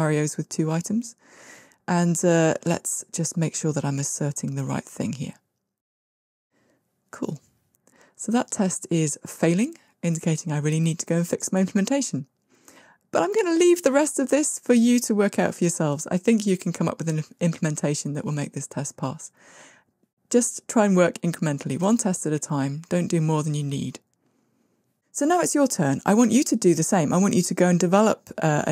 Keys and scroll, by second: 5.1 ctrl+r.